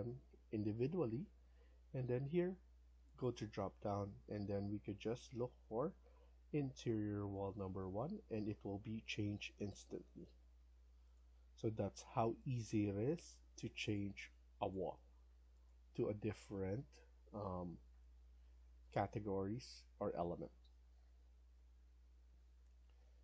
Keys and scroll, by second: 11.3 Escape, 16.0 Escape, 16.3 Escape.